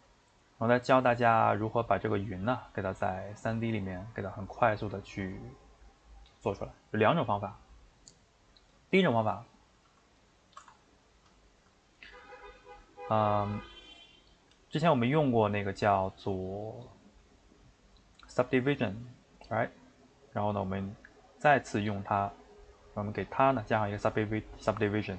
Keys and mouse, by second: 0.0-8.8 ctrl+middle drag, 8.8 click, 10.2 x, 10.5-12.1 ctrl+shift+middle drag, 12.1 click, 12.6-16.6 shift+middle drag.